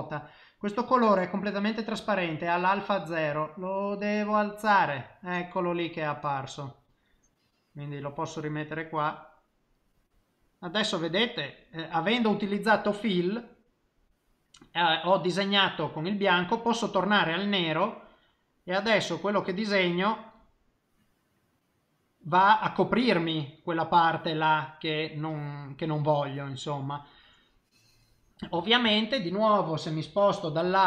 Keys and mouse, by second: 0.9 click, 6.0 click, 10.3 middle click, 16.3 click, 17.4 click, 18.8 click, 19.3 click, 20.0 click, 20.7 middle click, 22.9 middle click, 23.7 middle click, 24.5 middle click, 25.5 middle click, 28.8 middle click, 29.5 middle click, 30.6 KP_7.